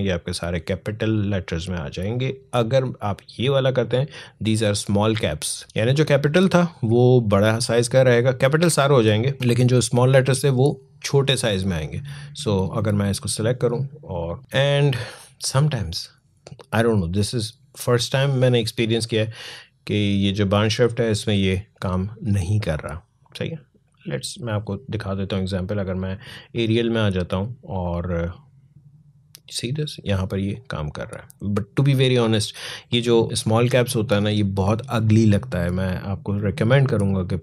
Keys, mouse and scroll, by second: 2.1 click, 10.4-17.9 drag, 18.7 click, 30.3 click, 37.3 click.